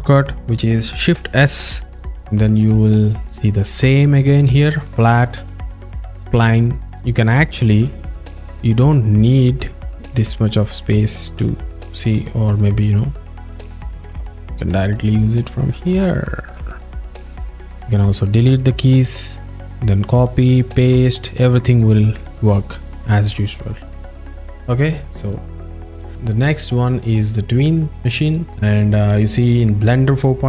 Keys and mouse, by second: 1.5 shift+s, 5.4 shift+s, 6.5 shift+s, 9.7-12.2 drag, 13.7 shift+s, 15.1 shift+s, 16.1 shift+s, 17.0 shift+s, 19.4 shift+s, 20.6 shift+s, 22.0 z, 24.6 click.